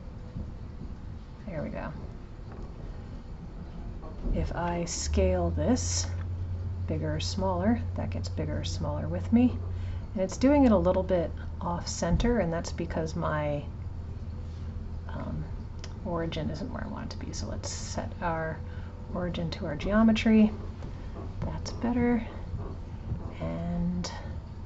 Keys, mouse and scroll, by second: 3.8 click, 12.2 click, 15.3-18.5 drag.